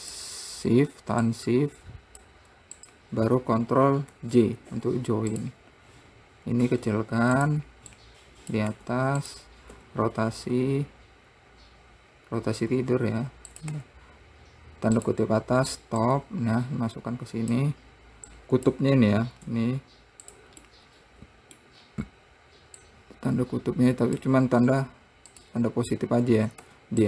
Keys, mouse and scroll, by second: 1.7 click, 3.2 shift+click, 4.5 ctrl+j, 5.7 click, 7.1 s, 8.4 click, 9.1 `, 10.1 r, 16.5 click, 18.7 click, 19.4 scroll up 4, 19.9 s, 21.1-22.2 middle drag, 22.2 scroll down 2, 23.2 click, 25.0 `.